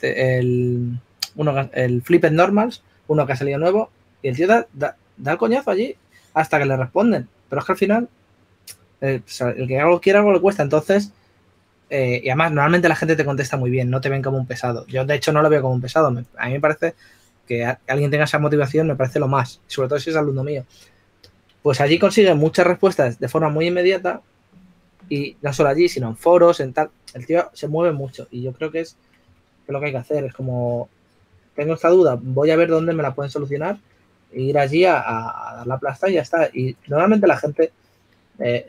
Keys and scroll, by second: 29.8-31.9 typing, 33.6 typing, 35.7-36.5 typing, 38.0 typing.